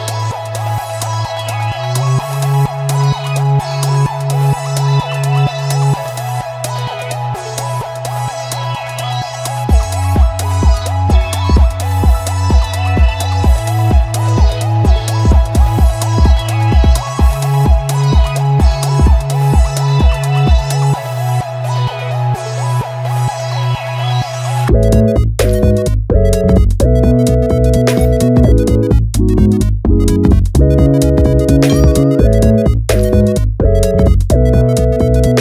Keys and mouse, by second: 0.0-1.2 typing, 0.2 click, 1.0 click, 1.4 alt+z, 1.6 shift+middle click, 2.9 s, 3.3 click, 3.4 s, 3.9 z, 4.0 click, 4.5 middle click, 4.7 Tab, 4.9 click, 5.3 KP_3, 5.4 alt+z, 5.7 g, 6.8 z, 6.8 click, 7.3 middle click, 7.7 Tab, 7.8 Tab, 8.2 click, 8.3 middle click, 8.5 click, 8.6 alt+z, 9.5 ctrl+alt+q, 10.7 middle click, 11.0 shift+middle click, 11.9 ctrl+alt+q, 12.5 g, 12.5 y, 13.0-14.3 drag, 14.3 KP_Divide, 14.8 KP_Divide, 15.0 alt+z, 15.2 middle click, 15.4 click, 15.6 Tab, 15.8 click, 16.1 middle click, 16.6 s, 16.9 x, 18.5 click, 19.1 middle click, 19.8 click, 19.9 middle click, 20.5 s, 20.7 s, 20.9 x, 21.2 click, 22.4 ctrl+r, 22.6 click, 22.9 g, 23.0 z, 23.7 click, 23.9 Tab, 23.9 click, 24.4 ctrl+b, 25.5 click, 25.7 click, 26.4 ctrl+click, 27.5 click, 28.6 click, 28.8 Tab, 29.0 click, 30.5 e, 31.6 click, 32.0 s, 32.4 click, 32.7-34.1 middle drag, 34.1 Tab, 34.4-34.9 middle drag, 35.0 ctrl+alt+w.